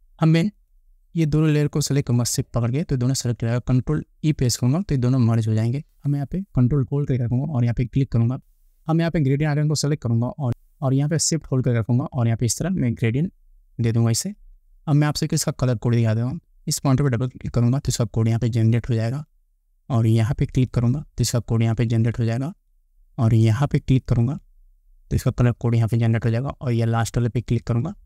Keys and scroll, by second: 4.7 ctrl+e.